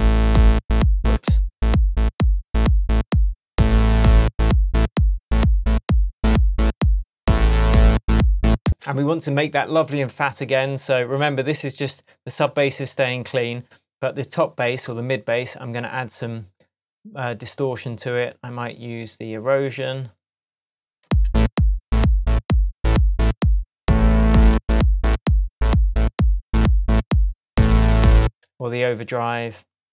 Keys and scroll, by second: 1.2 super+z, 8.6 space, 21.0 space, 28.2 space.